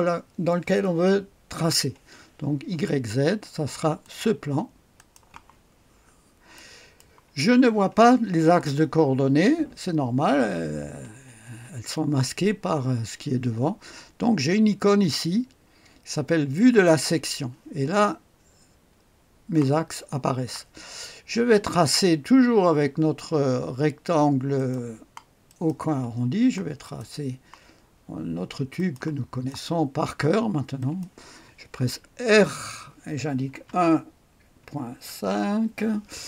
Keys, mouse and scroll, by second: 4.0-5.4 drag, 6.1-7.0 scroll up 1, 6.5 click, 16.5 click, 24.6 click, 25.5 click, 26.8 click, 28.8 click, 29.5 right click, 29.8 click, 30.1 click, 30.8 click, 32.3 r, 33.5 KP_1, 34.6 ., 34.9 KP_5, 35.2 Return, 36.1-36.2 scroll up 1.